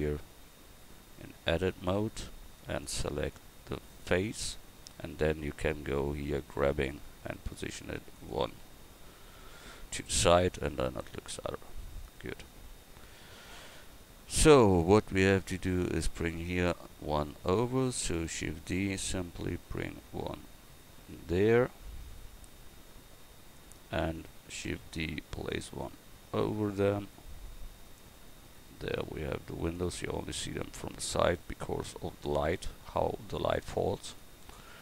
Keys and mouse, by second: 2.9 click, 3.9-8.2 right drag, 8.6 a, 12.3 Tab, 17.3-18.3 right drag, 18.3 shift+d, 19.3-21.5 drag, 24.7 shift+d, 26.3-27.8 drag.